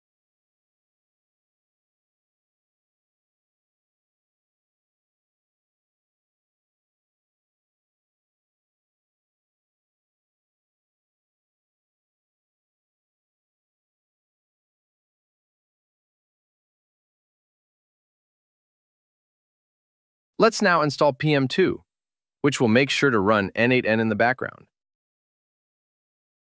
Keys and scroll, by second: 0.0 BackSpace, 0.8 BackSpace, 12.2 super+v, 13.6 super+v, 20.5 super+v.